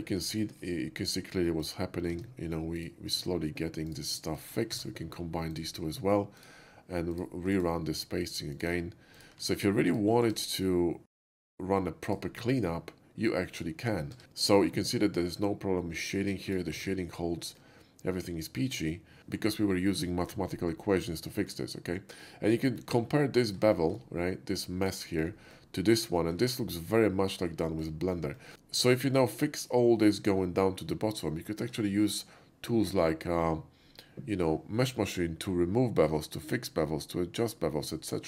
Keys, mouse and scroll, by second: 0.5 shift+middle click, 1.5 shift+middle click, 2.1 Tab, 2.8 click, 3.9 click, 4.4 shift+click, 4.8 1, 5.6 click, 6.4 click, 7.2 ctrl+click, 7.6 ctrl+right click, 8.6 ctrl+click, 9.2 ctrl+click, 9.9 ctrl+click, 10.3 ctrl+right click, 11.3 ctrl+click, 12.1 ctrl+click, 12.8 middle click, 14.2 ctrl+shift+z, 14.3 middle drag, 16.2 middle click, 16.4 shift+middle click, 16.8 Tab, 17.7-19.2 middle drag, 21.5-22.6 middle drag, 22.8 shift+middle click, 23.1 shift+middle click, 23.4 shift+middle click, 23.8 shift+middle click, 24.9 shift+middle click, 25.3 shift+middle click, 25.6 shift+middle click, 25.7 shift+middle click, 26.2 shift+middle click, 26.7 shift+middle click, 27.7 shift+middle click, 28.4 shift+middle click, 29.0 shift+middle click, 31.5 shift+middle click, 32.0 shift+middle click.